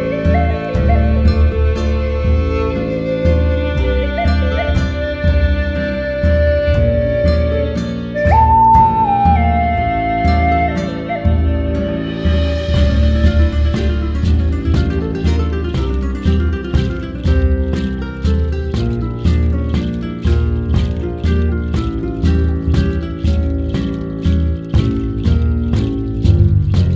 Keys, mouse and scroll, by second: 0.0 click, 0.2-0.9 scroll down 11, 0.9 shift+middle click, 1.4 click, 1.7-3.3 shift+middle drag, 1.7 scroll down 2, 2.6 scroll down 2, 2.8 scroll up 4, 3.0-3.3 scroll down 1, 3.3 Tab, 3.9 alt+j, 4.2 Tab, 4.4 click, 4.6 Tab, 5.0 alt+j, 5.2 Tab, 8.9-11.7 drag, 11.7-12.4 scroll up 15, 12.2 middle click, 12.4 shift+a, 13.7 ctrl+t, 14.0-14.4 middle drag, 14.4-16.5 drag, 16.7-18.0 drag, 18.0-18.5 scroll up 2, 18.5 shift+a, 20.0 scroll up 3, 20.3-23.4 drag, 23.5-24.5 drag, 24.9 middle click, 25.5-26.6 drag, 26.6-26.9 middle drag.